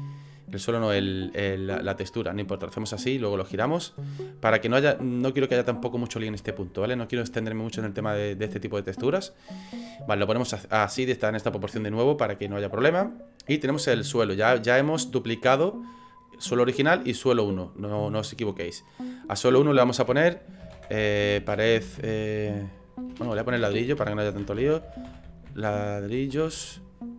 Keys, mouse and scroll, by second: 0.9 click, 3.0 scroll up 4, 3.5 middle click, 4.5 scroll up 1, 5.2 scroll down 2, 8.1 scroll down 2, 8.6 middle click, 9.3 scroll up 4, 9.8 scroll down 1, 14.4 click, 18.5 click, 23.2 BackSpace, 23.5 BackSpace, 23.7 BackSpace, 23.7 BackSpace, 25.4 l.